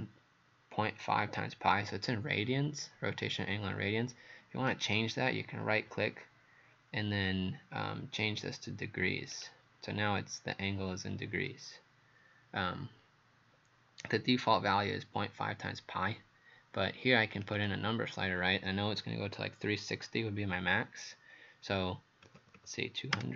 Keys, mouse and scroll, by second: 9.4 click, 17.5 click, 22.3 KP_2, 22.4 KP_0, 22.6 KP_0, 23.2 Return.